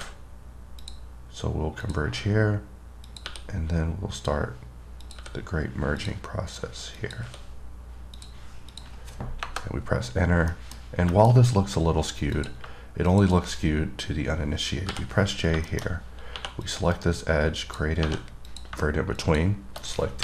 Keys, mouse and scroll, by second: 1.0 click, 2.1 click, 3.3 click, 4.4 click, 5.3 click, 6.2 click, 7.2 click, 8.4 click, 8.9 click, 10.5 scroll up 2, 10.7 middle click, 11.4 middle click, 11.6 scroll up 1, 12.1-12.6 scroll up 1, 12.6 click, 13.3 click, 15.5 scroll down 2, 15.9 middle click, 16.9 click, 17.2 right click, 17.8 click, 18.7 click, 19.5 click.